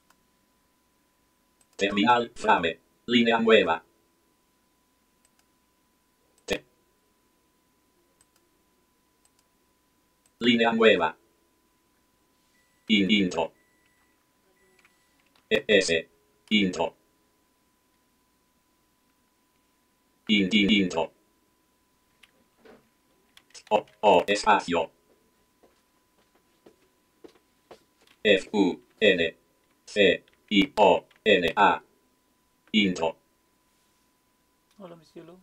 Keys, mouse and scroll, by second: 0.0 click, 1.6 click, 5.2 click, 6.4 click, 8.2 click, 9.3 click, 10.3 click, 12.9 Return, 13.1 Return, 15.1-16.0 typing, 16.5 Return, 20.3 Return, 20.5 Return, 20.7 Return, 23.3-24.4 typing, 27.9-31.5 typing, 32.7 Return, 32.9 typing.